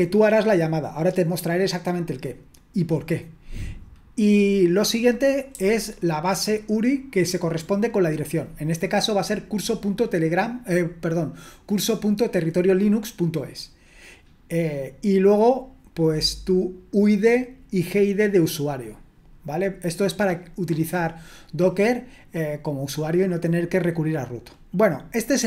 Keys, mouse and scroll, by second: 5.5 j.